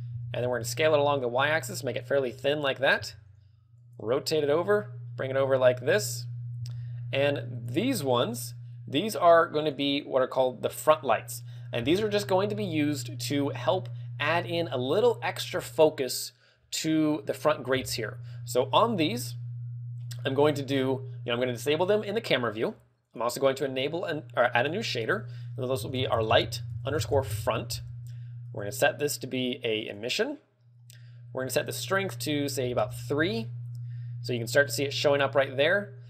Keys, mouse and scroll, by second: 0.1 click, 0.9 s, 2.3 click, 2.5 KP_3, 2.6 click, 2.6 KP_3, 3.3 g, 4.4 click, 4.4 r, 7.0 click, 7.1 g, 8.2 click, 8.2 g, 13.1 click, 17.0 click, 22.8 click, 23.3 click, 23.7 click, 24.3 click, 25.2 click, 28.7 click, 30.5 click, 31.9 ctrl+click, 33.4 ctrl+click.